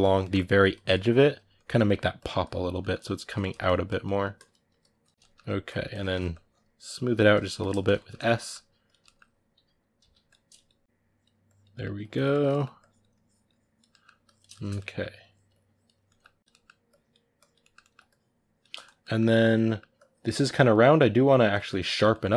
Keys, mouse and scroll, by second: 0.0 middle click, 0.5 click, 0.8 middle click, 1.3 click, 1.5 middle click, 1.9 click, 2.6 middle click, 3.1 click, 3.3 ctrl+middle click, 3.6-4.9 drag, 4.9 ctrl+middle click, 5.4 click, 5.6 ctrl+middle click, 6.1-7.5 shift+drag, 7.5-8.6 shift+middle drag, 8.6 click, 8.8 ctrl+middle click, 9.8 f, 10.8 f, 11.2 click, 11.5 middle click, 11.9 click, 12.1 ctrl+middle click, 12.6-13.7 drag, 13.7 middle click, 14.0 click, 14.3 shift+middle click, 15.0 click, 15.8 ctrl+middle click, 16.3 click, 16.4 middle click, 16.6 click, 17.4 ctrl+middle click, 17.8 click, 18.8 middle click, 19.1 click, 19.4 middle click, 19.7-21.4 drag, 21.4-22.3 ctrl+middle drag.